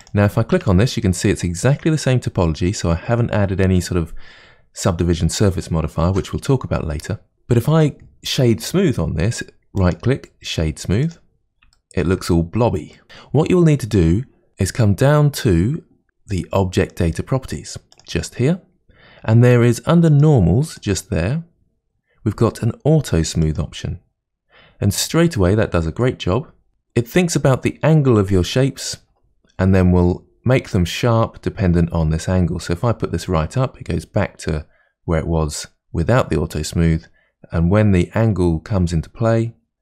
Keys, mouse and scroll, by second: 0.0 click, 0.5 Tab, 9.7-11.7 right drag, 11.7-13.3 shift+middle drag, 17.9 click, 20.1 click, 23.4 click, 26.0-27.3 middle drag, 30.7-33.7 drag.